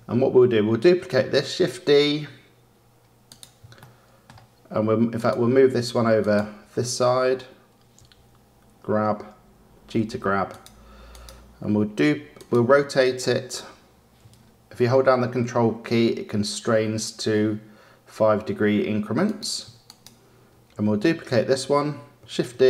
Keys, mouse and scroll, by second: 1.4 shift+d, 3.8-5.1 shift+middle drag, 5.1 click, 5.5 d, 6.1 click, 6.5 d, 7.9 g, 11.0 click, 12.3 click, 13.4 r, 19.8 click, 21.0 d, 22.4 shift+d.